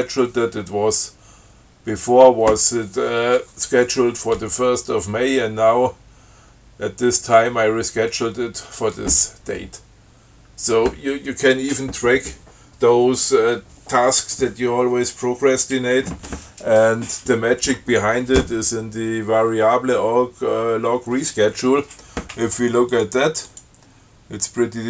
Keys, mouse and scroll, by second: 23.2 click, 23.7 click.